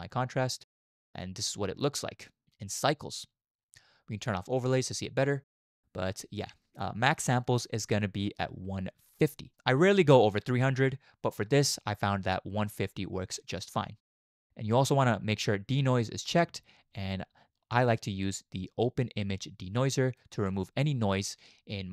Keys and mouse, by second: 4.6 click, 4.7-9.6 middle drag, 16.4 click, 20.2 click.